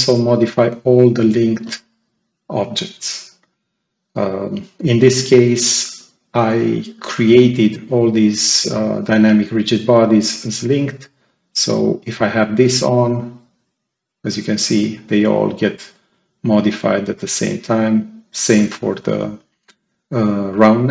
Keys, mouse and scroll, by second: 3.4 click, 12.3-14.7 drag, 17.3-19.5 drag.